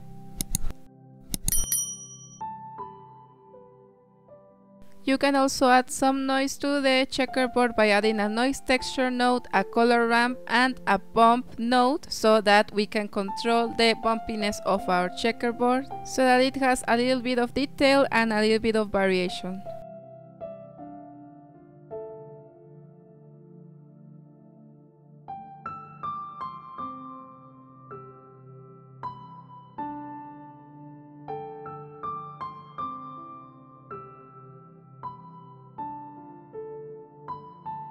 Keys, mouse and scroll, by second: 0.5-1.6 middle drag, 1.6 shift+a, 2.5-4.1 drag, 4.1 shift+a, 6.1-6.6 drag, 7.4-8.5 drag, 8.5 shift+a, 10.9-11.4 drag, 11.9-12.6 drag, 15.3-17.0 drag, 17.8-19.5 drag, 20.4-20.8 drag, 20.8 ctrl+t, 20.9-22.7 middle drag, 22.7 scroll up 2, 22.9-23.8 drag, 25.8-29.9 drag, 31.1 click, 32.5-33.9 drag, 34.8 click, 36.9-37.9 drag.